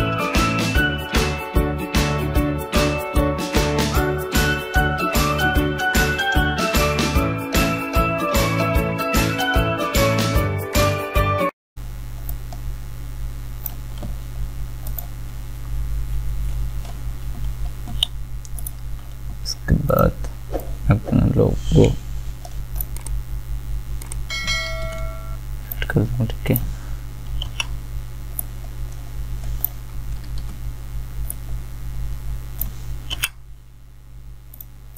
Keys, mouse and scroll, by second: 9.3-14.9 drag, 18.6-24.7 drag, 24.7 ctrl+t, 25.7 shift+click, 27.4 Return, 30.3 ctrl+t, 31.3 shift+click, 33.1 Return.